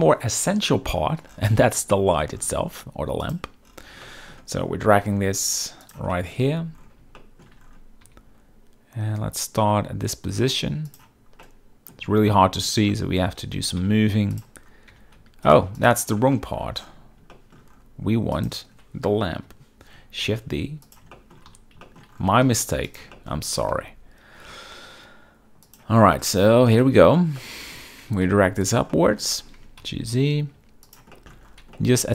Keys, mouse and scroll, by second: 0.0 KP_7, 2.0 shift+middle drag, 3.3 click, 4.1-4.4 shift+middle drag, 5.1 g, 5.9 click, 6.2 shift+middle drag, 6.5 z, 7.3 shift+middle drag, 8.1 g, 11.5-12.0 middle drag, 12.0 scroll, 12.1 z, 12.4-12.8 middle drag, 13.0 shift+middle drag, 13.6 g, 13.9 z, 14.4 click, 15.0 g, 15.3 z, 15.8 x, 16.4 middle drag, 17.4 shift+middle click, 18.5 click, 19.5 KP_7, 20.3 shift+d, 21.2 shift+drag, 21.6 z, 21.9 shift+middle drag, 22.5 g, 23.3 shift+middle drag, 23.8 g, 25.8 shift+click, 26.3-26.8 middle drag, 26.3-26.8 scroll, 26.9 z, 27.5-27.8 shift+middle drag, 28.1 g, 28.4 z, 28.7 click, 29.0 shift+middle drag, 29.7 g, 29.9 z, 31.0 shift+click, 31.2 shift+middle drag, 31.9 middle click.